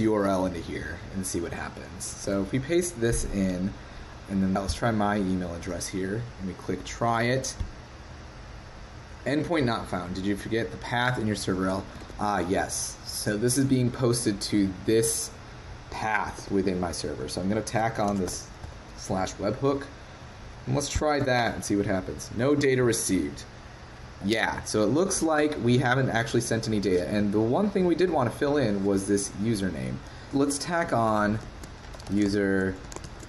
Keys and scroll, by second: 2.2 super+v, 12.0 super+Tab, 16.4 super+Tab, 31.5 shift+super+Right.